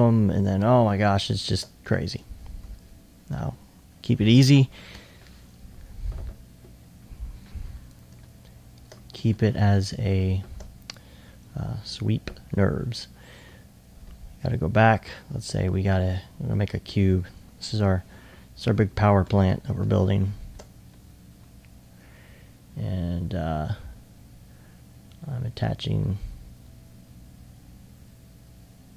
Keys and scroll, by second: 1.4 alt+e, 9.5 alt+1, 17.0 r, 20.9 alt+2, 21.3 alt+2, 21.8 alt+e, 23.3 e.